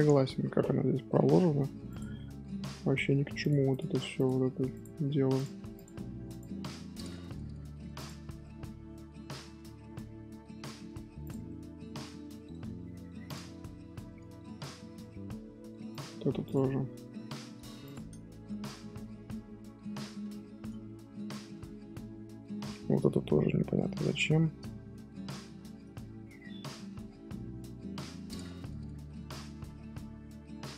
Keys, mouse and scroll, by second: 0.5 scroll up 2, 1.8 click, 3.7 click, 4.7 click, 5.7 click, 6.5-6.9 middle drag, 6.9 a, 8.4-10.6 middle drag, 10.6 Tab, 11.2 click, 11.4-12.0 middle drag, 12.0 g, 14.0 scroll down 4, 14.2 Tab, 14.6-15.0 middle drag, 15.0 Tab, 15.2-15.9 scroll up 2, 15.9 click, 16.2 g, 18.7-19.6 middle drag, 19.6 scroll down 1, 19.9-20.6 middle drag, 20.6 scroll up 1, 20.7 scroll down 1, 21.1-25.1 middle drag, 25.1-25.6 scroll up 2, 25.6-30.7 shift+middle drag.